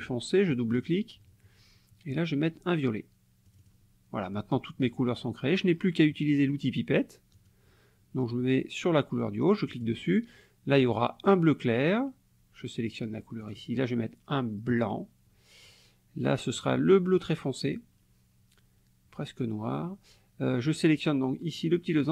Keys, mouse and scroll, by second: 0.5 click, 3.5 click, 7.4 click, 9.7 click, 11.3 click, 13.4 click, 14.7 click, 16.6 click, 17.7 click, 20.6 click.